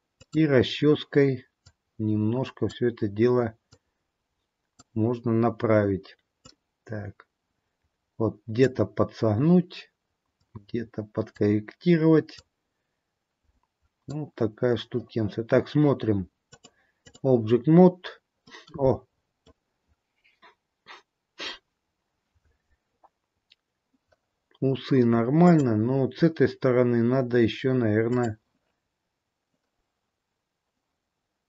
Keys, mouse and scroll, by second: 0.2 click, 3.8 click, 6.5 click, 10.5 click, 12.5 click, 16.4 click, 18.3 scroll down 2, 18.6 middle click, 22.8-23.9 scroll up 2, 25.3 click.